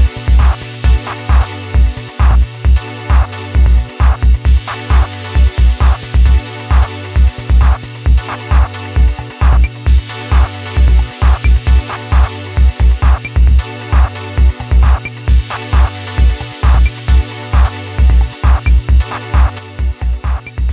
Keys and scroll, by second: 1.6 Return, 18.4 Up, 18.8 Left, 19.5 Up, 19.7 Left.